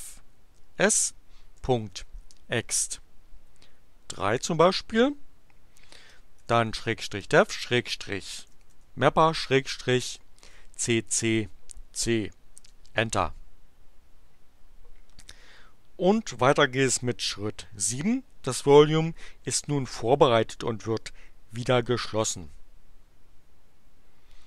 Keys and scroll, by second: 1.4-2.6 typing, 4.6 3, 5.7-9.4 typing, 10.5 c, 12.6 Return.